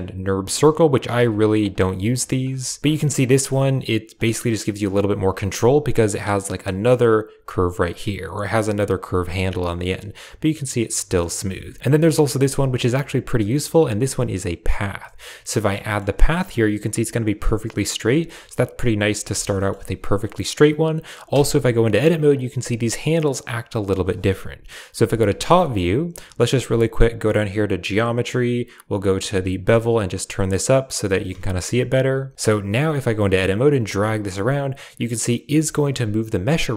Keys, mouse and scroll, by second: 1.0 Tab, 1.5 click, 1.7 g, 2.3 click, 2.4 g, 2.8 KP_7, 3.2 shift+click, 4.0 click, 5.1 click, 5.5 g, 8.6 g, 9.4 shift+click, 11.2 Tab, 11.6 Tab, 11.8 x, 11.8 shift+a, 15.4 middle drag, 15.7 shift+middle click, 19.0 middle click, 19.4 shift+middle click, 21.2 Tab, 21.7 middle click, 22.2 click, 22.5 g, 23.3 click, 24.8 KP_7, 25.5 shift+middle click, 27.0 click, 29.0 click, 29.7-30.9 shift+drag, 31.2 a, 31.3 a, 31.5 s, 32.0 Tab, 32.5 Tab, 33.6 g, 35.0 click, 35.3 g.